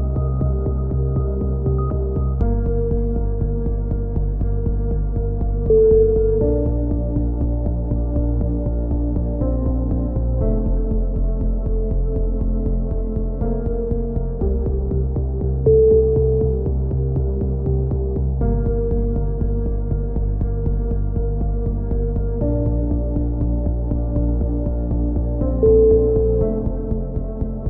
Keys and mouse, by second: 0.2 b, 1.1 e, 1.8 click, 4.5 click, 6.2 c, 6.9-8.2 drag, 8.9 a, 9.2 z, 9.7 click, 11.2 KP_7, 11.5 z, 12.0 b, 13.4 s, 15.4 a, 15.8-17.6 middle drag, 16.5 KP_3, 17.6 KP_7, 19.0 ctrl+r, 20.5 a, 20.9 b, 22.3 s, 23.7 a, 23.8 z, 24.0 middle click, 24.2 click, 25.1-27.2 typing, 25.3-26.4 middle drag.